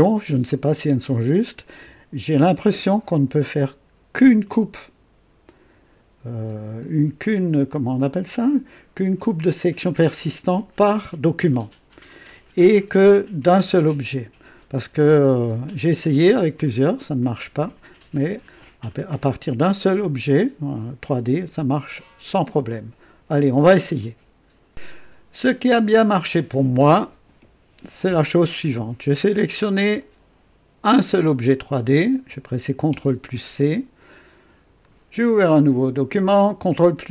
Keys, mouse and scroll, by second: 7.9 click, 9.8 click, 29.7 click, 32.9 ctrl+c, 34.8 click, 36.5 ctrl+v.